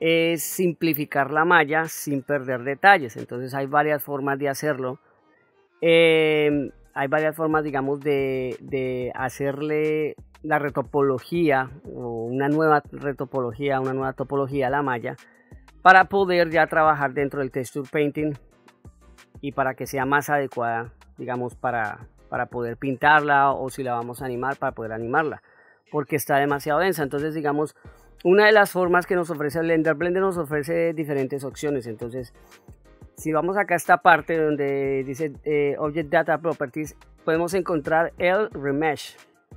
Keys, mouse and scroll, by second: 0.1-0.6 middle drag, 2.9 middle click, 15.8 middle click, 16.8 shift+middle click, 17.6-18.0 middle drag, 18.4 middle click, 19.3 middle click, 20.0-20.7 ctrl+middle drag, 21.0 middle click, 25.4-25.9 middle drag, 26.4 middle click, 28.9-29.3 middle drag, 29.9 middle click, 36.1 click, 38.7 click.